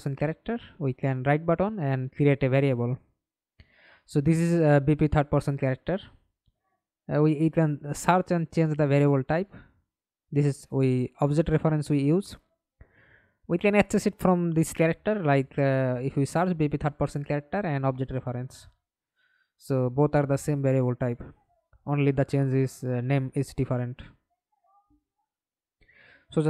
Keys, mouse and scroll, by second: 3.2-5.3 typing, 12.0-15.0 typing, 17.4 right click, 18.2-19.8 scroll up 2, 19.9 right click, 22.1 right click, 25.3 double click.